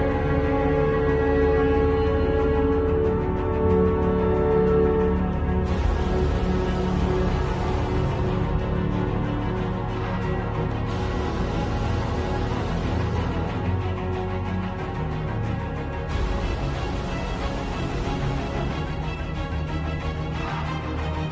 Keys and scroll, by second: 7.8 space, 8.7 x, 12.5 space, 15.4-21.3 typing.